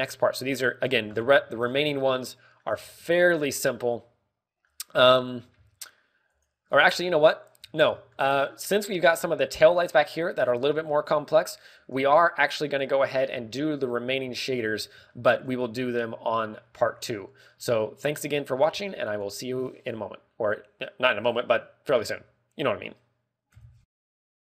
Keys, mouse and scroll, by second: 0.7 shift+middle click, 1.8-3.0 scroll down 8, 3.0 middle click, 3.8 scroll down 1, 4.1 shift+middle click, 4.5 scroll down 1, 4.9 middle click, 6.0 middle click, 6.6-6.9 scroll up 3, 7.9 right click, 7.9 scroll down 1, 8.0 middle click, 8.5 z, 8.9 shift+middle click, 9.2 middle click, 10.0 scroll up 3, 10.0 z, 10.5 z, 11.0-11.8 scroll down 6, 11.7 z, 11.9 middle click, 12.9 z, 13.2 middle click, 13.9 KP_1, 14.2 scroll down 3, 14.4 shift+middle click, 14.8 scroll up 3, 15.0 a, 15.3 shift+middle click, 15.7 z, 16.0 shift+middle click, 17.9 a, 17.9 z, 18.7 z, 19.7 ctrl+w, 19.7 z.